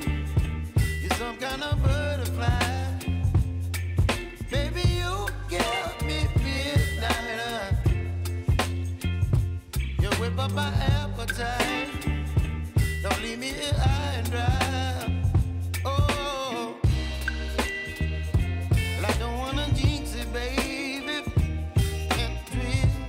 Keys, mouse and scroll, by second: 2.9 Return, 3.6 click, 7.5 s, 8.0-11.0 drag, 11.0-15.4 drag, 17.3-17.9 alt+scroll up 1, 18.4-21.5 drag.